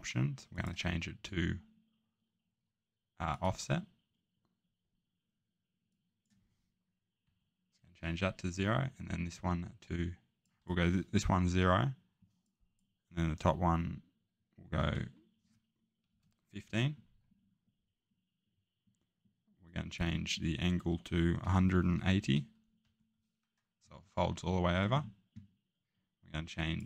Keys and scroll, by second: 7.2 0, 14.6 typing, 16.1-16.6 typing, 21.4-22.8 typing.